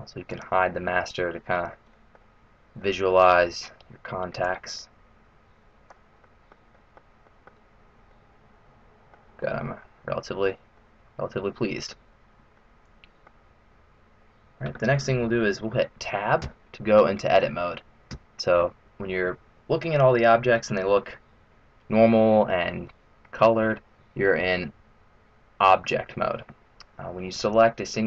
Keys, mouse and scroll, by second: 0.2 click, 0.9 middle click, 1.9 middle click, 2.4-2.7 scroll up 1, 2.7 middle click, 4.3 click, 6.1 middle click, 6.7 middle click, 7.2 middle click, 7.8 scroll up 3, 8.1 middle click, 10.1 middle click, 10.8 middle click, 11.9-12.5 scroll down 1, 12.5 middle click, 12.5 scroll down 1, 16.4 Tab, 18.2 Tab, 19.9 middle click, 22.1-22.6 scroll down 2, 22.6-23.8 scroll up 1, 23.8-24.3 scroll up 1.